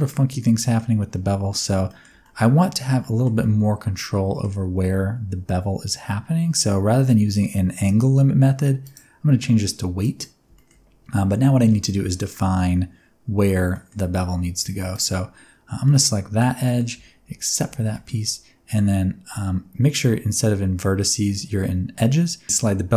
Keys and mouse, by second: 1.8 middle click, 2.2 shift+middle click, 3.0 middle click, 3.4-4.4 middle drag, 8.9-10.2 drag, 10.5 shift+middle click, 13.7 middle click, 14.6 1, 14.9 alt+click, 15.8 middle click, 16.6 middle click, 17.9 middle click.